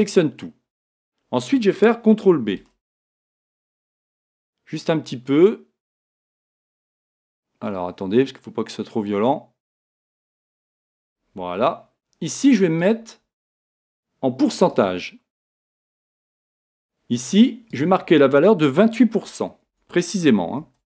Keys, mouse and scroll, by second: 2.6 ctrl+b.